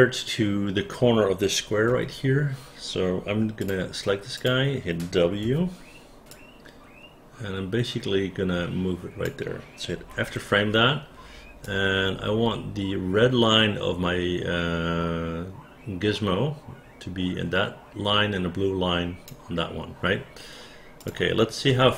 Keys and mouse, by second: 1.9 w, 3.6 click, 4.4 click, 5.4 w, 6.3-9.2 drag, 10.0 f, 11.6-19.2 drag, 21.0 click, 21.7 space.